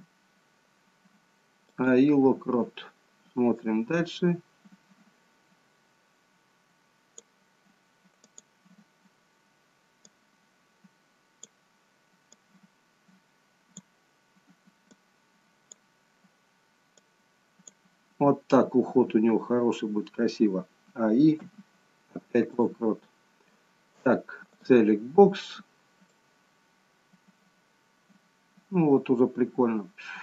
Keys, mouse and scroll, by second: 3.5 click, 8.2 click, 10.1 click, 12.2 click, 15.0 click, 16.9 click, 19.0-19.5 scroll down 1, 20.8 a, 21.4 i, 24.4 click, 26.0 click.